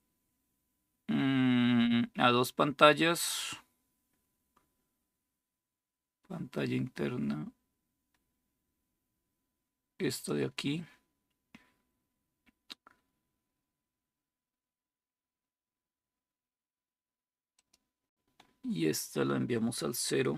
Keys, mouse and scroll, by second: 9.9 click, 17.3-18.4 drag.